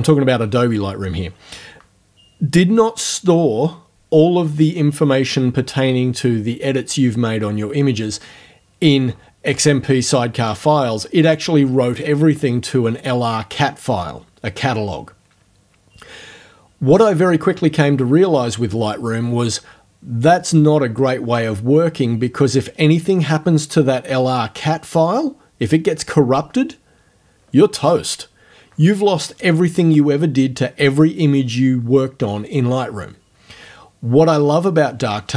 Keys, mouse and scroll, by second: 9.6 click, 10.5 click, 11.3 click.